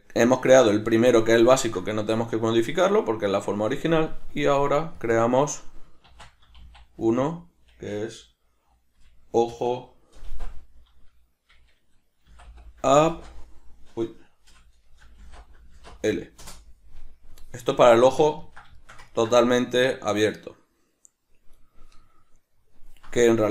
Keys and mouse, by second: 5.0 click, 5.1-17.9 drag, 17.9-23.5 shift+middle drag.